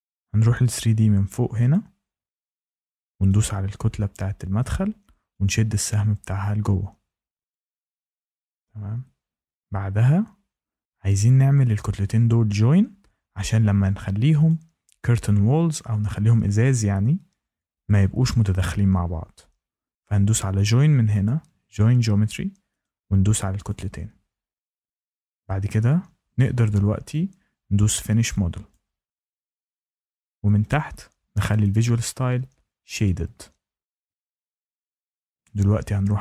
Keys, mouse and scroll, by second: 1.6 click, 3.2 click, 7.4 click, 14.4 click, 21.2 click, 22.8 click, 23.6 click, 28.6 click, 31.6 click, 32.9 click.